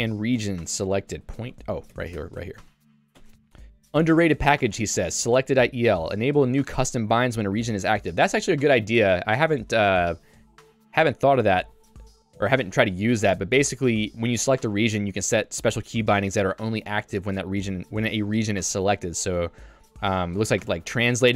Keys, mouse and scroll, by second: 0.8-2.7 typing, 2.2 Escape, 3.2 Tab, 3.7 j, 5.1-7.5 typing, 12.5 Escape, 12.8 j, 16.8 k, 20.0 j.